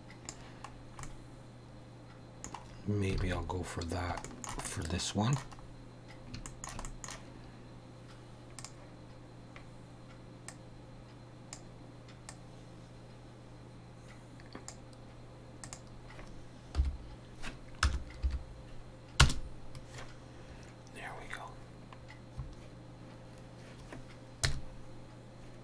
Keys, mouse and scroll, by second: 0.8 scroll down 2, 1.1 middle click, 3.3 alt+a, 3.9 scroll down 1, 4.2 shift+middle click, 4.7 middle click, 5.6 scroll up 2, 6.5 shift+middle click, 6.9 middle click, 8.6 click, 10.5 click, 12.3 click, 15.6 click, 22.1 scroll down 1, 24.4 KP_0.